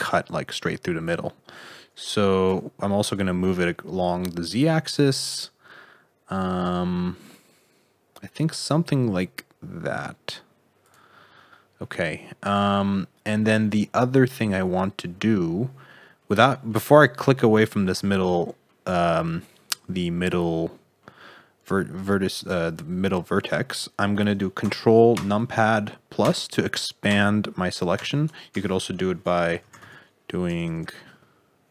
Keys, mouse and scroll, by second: 16.1 middle click, 18.1 middle click, 19.5 middle click, 22.3 click, 25.1 ctrl+KP_Add, 26.2 ctrl+KP_Add, 27.0 ctrl+KP_Add, 27.9 ctrl+KP_Add, 28.5 space, 30.6 BackSpace, 30.8 BackSpace.